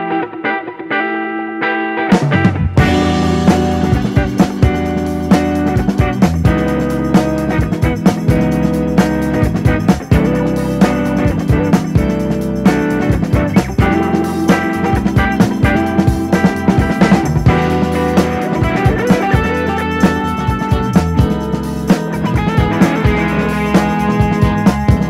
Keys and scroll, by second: 1.4-2.8 typing, 3.2 Return, 6.3 Return, 7.6 Right, 9.3 Left, 11.5 super+c, 11.6 super+v.